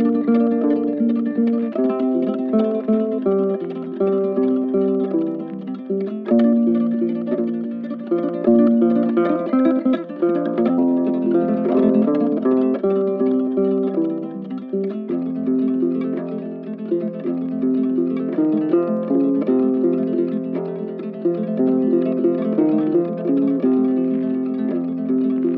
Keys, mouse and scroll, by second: 1.0 right click, 4.2 right click, 5.5 ctrl+z, 9.9 right click, 10.5 alt+click, 11.5 double click, 12.6 right click, 13.8 double click, 15.9 double click, 17.8 alt+click, 18.1 alt+click, 19.8 right click, 20.3 shift+click, 22.8 right click.